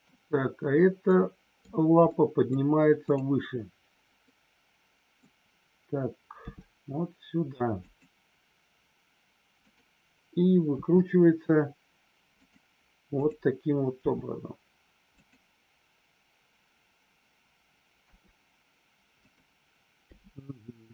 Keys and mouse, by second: 1.0-1.6 middle drag, 2.0-2.5 middle drag, 4.2-5.2 middle drag, 7.8 click, 10.6 r, 12.3 click, 13.2 click, 13.9 g, 18.0 r, 20.0 g.